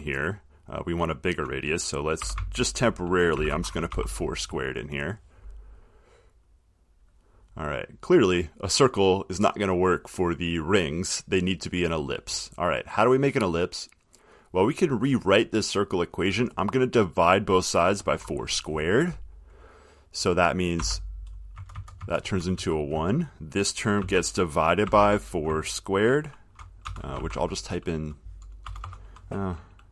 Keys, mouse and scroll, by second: 2.4 4, 3.5-4.6 typing, 6.8-8.7 drag, 10.9 click, 13.2 click, 15.1 click, 21.0-25.5 typing, 27.0-27.3 typing, 28.8 typing.